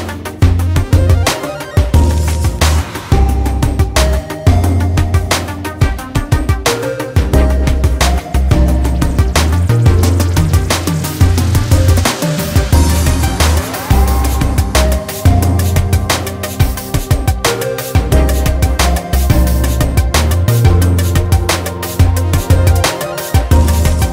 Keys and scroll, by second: 10.2 ctrl+z, 13.2 ctrl+z.